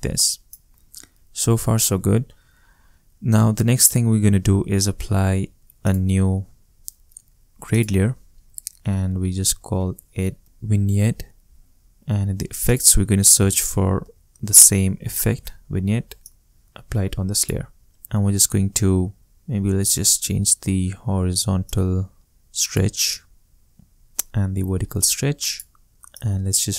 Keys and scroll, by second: 10.4 e, 10.9 e, 13.1-14.5 typing.